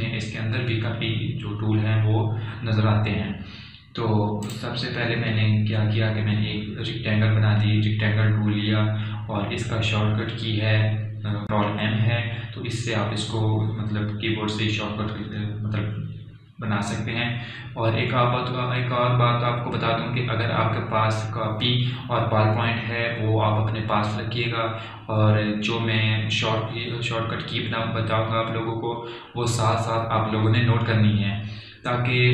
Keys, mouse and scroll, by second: 5.1-15.1 drag.